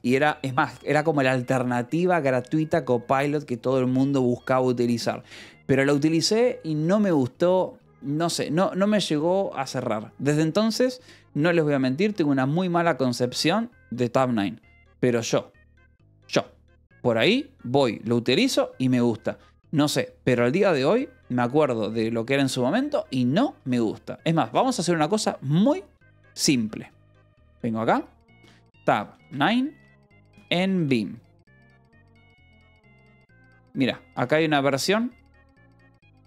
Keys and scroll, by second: 7.7 j, 15.7 j, 18.5 k, 19.8 k, 23.3 j, 23.6 k, 28.0-34.1 typing, 35.8 j.